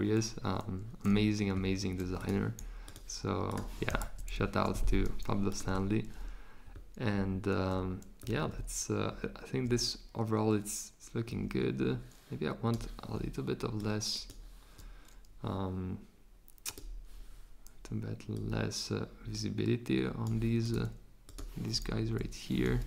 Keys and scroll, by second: 22.0 BackSpace, 22.6 z.